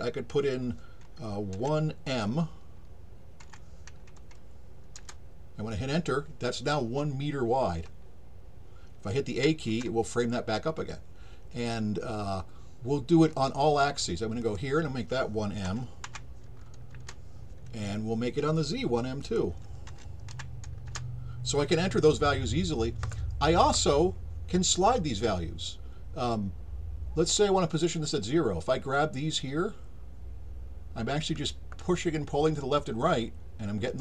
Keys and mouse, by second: 13.3 click, 14.4 click, 19.2 click, 28.9-34.0 drag.